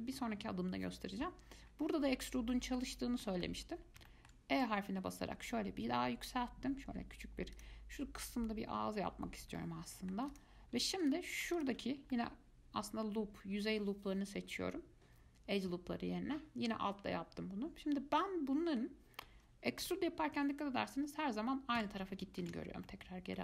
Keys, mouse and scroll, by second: 1.9-2.3 scroll up 1, 2.3-2.7 scroll down 1, 2.7 middle click, 3.2 scroll up 1, 3.4 middle click, 3.9-4.3 scroll up 1, 4.3 shift+middle click, 4.8 e, 9.8-10.5 middle drag, 10.5 click, 11.2 click, 11.8 alt+click, 12.3-15.3 middle drag, 20.0 e, 22.6 ctrl+z, 23.1-23.4 middle drag.